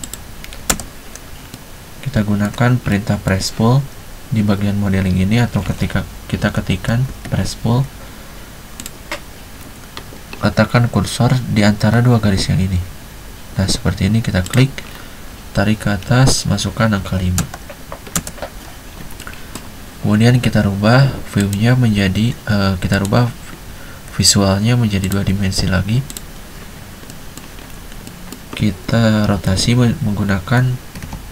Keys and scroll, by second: 0.9 space, 6.3-7.6 typing, 17.0-18.3 typing, 24.6 Escape, 29.6 r, 30.4 Escape, 31.1-31.3 typing.